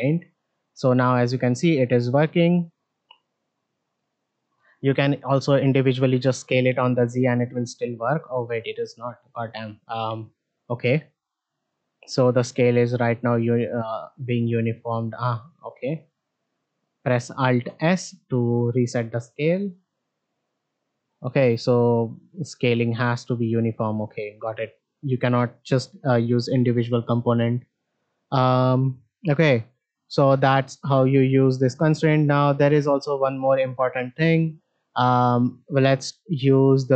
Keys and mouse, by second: 9.0 middle click, 17.6 alt+s, 18.7 middle click, 19.4 s, 21.6 middle click, 25.7-36.9 drag.